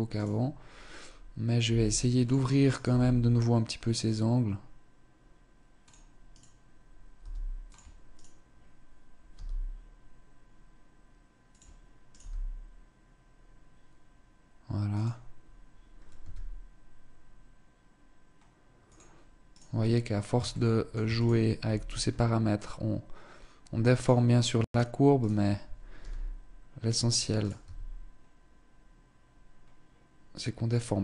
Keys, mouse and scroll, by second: 1.2 g, 2.3 right click, 2.5 g, 6.0 right click, 6.8 g, 7.8 right click, 9.0 g, 11.7 right click, 11.8 g, 15.8 s, 19.2 right click, 19.6 scroll down 1, 20.1 shift+middle click, 20.6 right click, 21.3 s, 24.2 right click, 24.8 right click, 25.5 g, 26.4 click, 26.9 right click, 27.2 s.